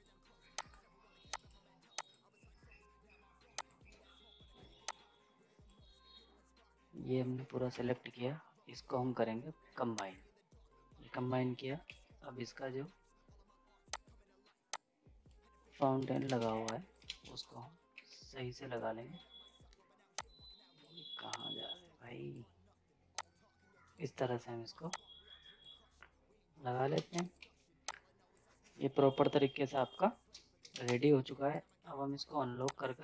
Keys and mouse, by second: 7.7 ctrl+z, 9.9 click, 11.9 g, 13.9 click, 15.8 z, 15.9 right click, 16.2 ctrl+space, 16.5 z, 16.7 click, 17.0 ctrl+space, 17.9 g, 20.1-26.9 drag, 26.9 ctrl+space, 27.1 click, 27.3 z, 27.8-29.7 drag, 29.7 right click, 30.7 ctrl+space, 30.9 click, 31.5 right click, 32.7 click.